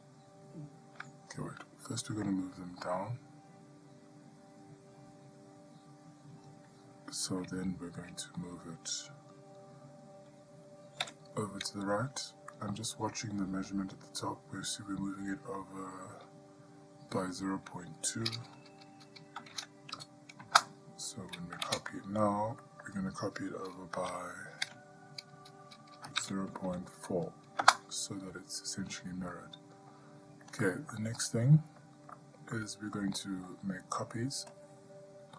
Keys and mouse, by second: 11.2 g, 21.9 shift+d, 29.5-30.1 middle drag, 30.9 shift+middle drag, 31.5-32.0 middle drag, 32.4-32.9 shift+middle drag, 33.2-33.7 middle drag, 34.8-35.3 drag.